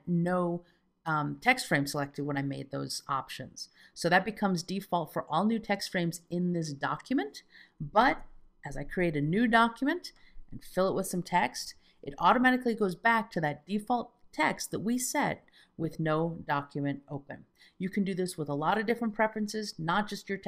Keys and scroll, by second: 8.7 Return, 11.7 F2.